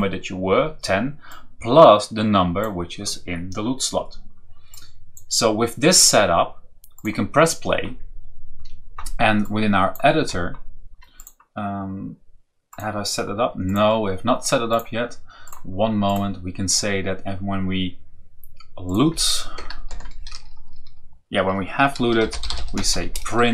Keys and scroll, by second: 10.2 Down, 19.5 Return, 19.8 Up, 21.9-23.3 typing.